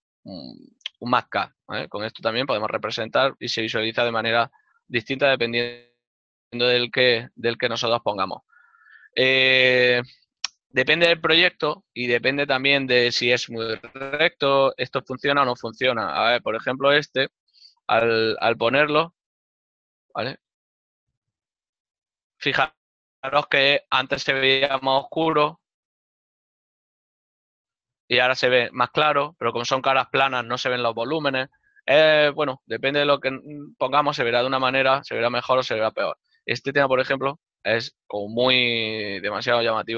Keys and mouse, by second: 15.9 right click, 16.7 Tab, 17.4 click, 20.7 a, 33.5 click, 34.4 ctrl+middle click, 36.1 right click, 37.5 Tab, 38.1 click.